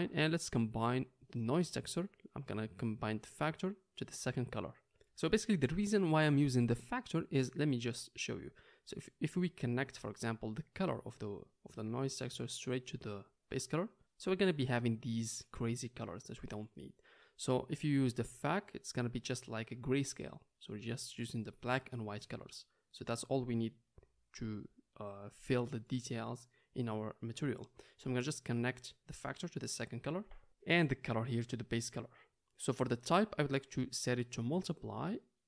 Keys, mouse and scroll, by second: 1.1-35.4 drag.